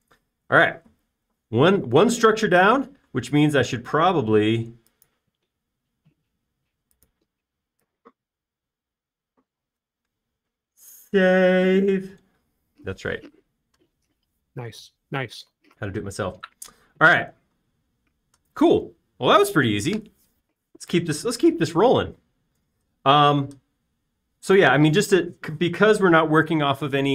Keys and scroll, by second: 23.7 e, 25.2 space.